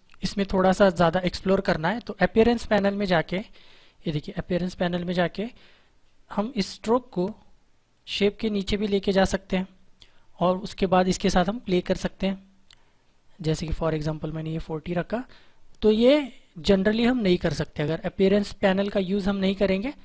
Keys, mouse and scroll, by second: 4.2 click, 11.5 click.